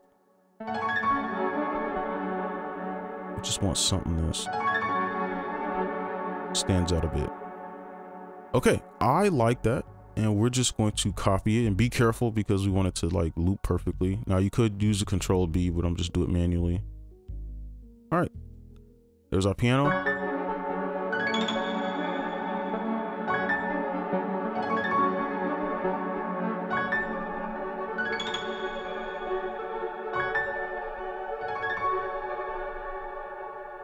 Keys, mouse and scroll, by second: 1.9 right click, 2.8 ctrl+click, 4.4 space, 5.5 right click, 8.9 ctrl+right click, 13.5 shift+click, 17.6 right click, 22.5 ctrl+a, 23.1-25.4 alt+scroll down 3, 25.6-26.4 alt+scroll down 3, 28.9-29.7 alt+scroll down 3, 29.7-31.7 alt+scroll down 1, 32.7 space, 33.1 double click.